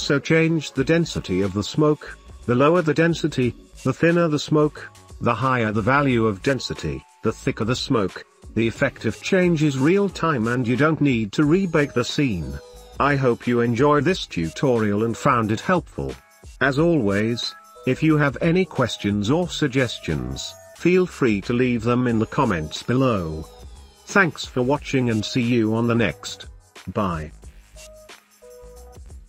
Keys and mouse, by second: 0.1-1.2 drag, 4.2 click, 6.1-7.9 drag, 10.6-12.7 drag, 13.2 click, 13.6 click, 14.0 drag, 14.6 click, 15.0 shift+click, 16.6-17.0 drag, 17.2-17.7 shift+drag, 18.0 ctrl+s, 18.9 click, 19.2 space, 20.6 click, 21.1 space, 22.5-23.4 drag, 24.2 middle click, 25.1 space, 27.5 space, 28.0 ctrl+s.